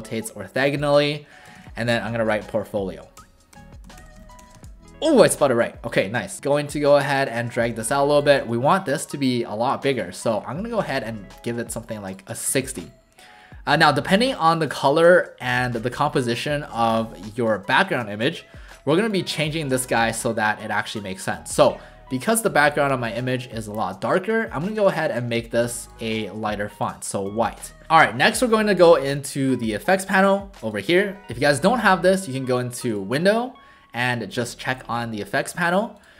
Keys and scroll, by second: 1.5 ctrl+a, 2.2-4.9 typing, 8.6 ctrl+a, 19.4 ctrl+a.